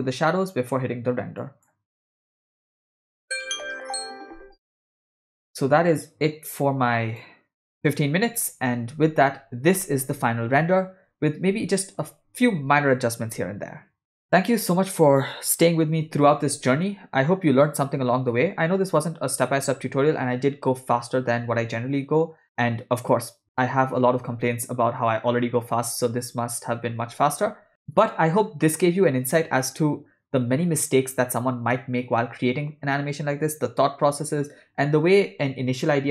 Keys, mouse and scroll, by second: 1.4 click, 2.6 drag, 6.6 click.